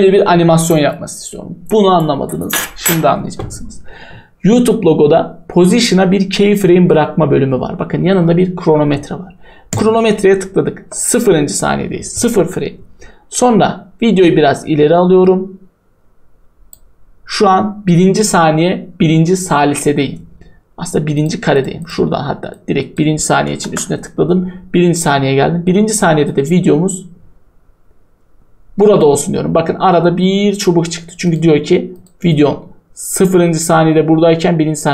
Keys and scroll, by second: 23.5 0, 23.6 Return.